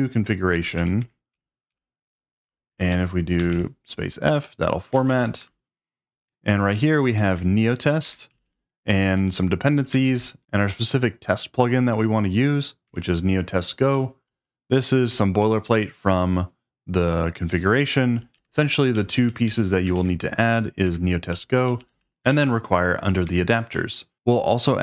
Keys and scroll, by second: 0.4-1.7 typing, 2.9 Escape, 3.4 space, 3.5 f, 5.1 shift+5, 6.7-10.0 typing, 8.0 Escape, 12.9 Escape, 13.9-16.2 typing, 18.3-24.0 typing, 20.8 Escape, 23.2 Escape.